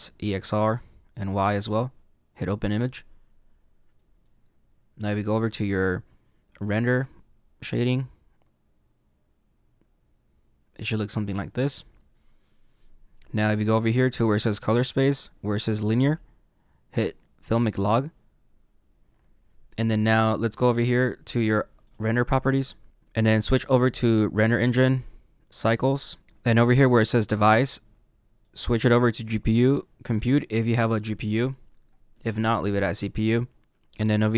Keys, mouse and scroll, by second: 3.9 middle click, 7.0 click, 7.7 middle click, 17.8 click, 25.7 click, 29.8 click.